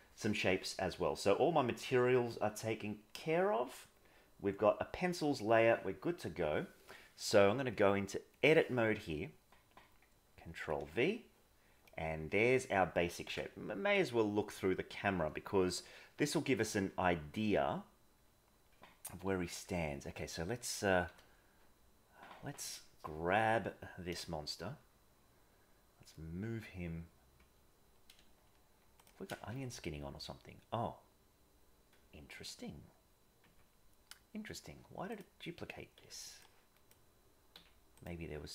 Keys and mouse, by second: 7.8 click, 10.5 ctrl+v, 10.7 ctrl+v, 11.8-12.5 middle drag, 13.2 KP_0, 19.6 KP_1, 21.0 g, 29.5 Tab, 33.4 Tab, 35.0 click, 35.9 b, 37.5 x.